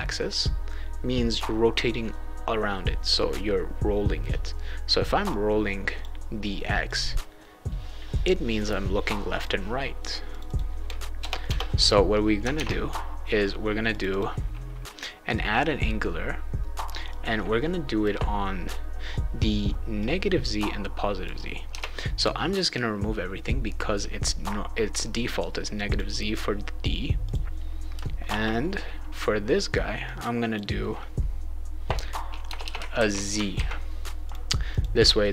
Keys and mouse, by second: 5.3 click, 6.9-9.4 drag, 10.3 click, 10.4 click, 12.5 alt+Tab, 13.9 click, 14.1 click, 17.1 click, 20.0-21.2 drag, 21.7 BackSpace, 25.9 click, 27.2 click, 28.2 shift+0, 30.0 click, 32.5 BackSpace, 32.6 BackSpace, 32.9 shift+z, 33.5 ctrl+s, 34.2 click, 34.7 click.